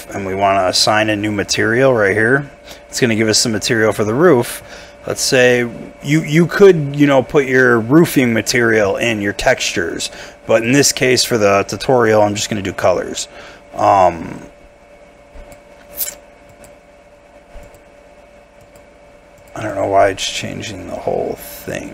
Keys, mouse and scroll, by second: 4.3 middle click, 19.7 double click.